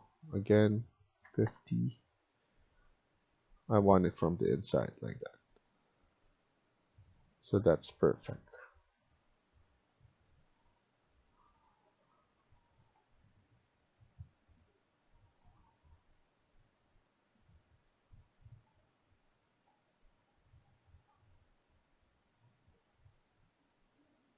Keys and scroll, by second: 0.8 Escape, 1.1-1.4 typing.